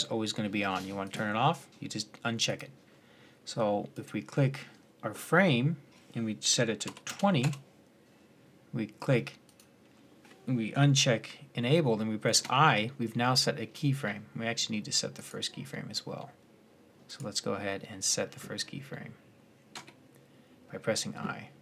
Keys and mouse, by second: 7.2-9.2 middle drag, 11.2-15.0 middle drag, 12.1 i, 19.5-21.6 middle drag.